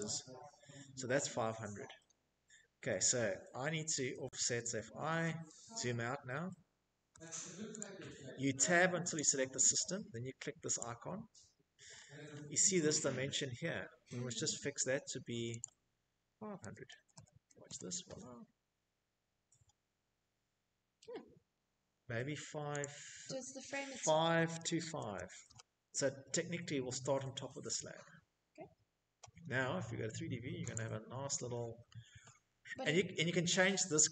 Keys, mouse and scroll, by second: 0.3 click, 0.5 Escape, 1.9 Escape, 2.2 Escape, 3.0-4.0 scroll, 4.2 middle click, 4.9 Tab, 6.0 Escape, 10.9 click, 10.9 middle click, 11.0 middle click, 11.2 scroll, 12.6 middle click, 13.4 click, 13.4 middle click, 14.4-16.0 typing, 15.9 scroll, 17.9-18.9 scroll, 21.5 middle click, 21.5 click, 21.9-23.5 typing, 23.5 Return, 24.8 Escape, 28.5 scroll, 28.8 click, 29.3-30.5 scroll, 31.7-33.0 scroll, 33.8-34.1 scroll.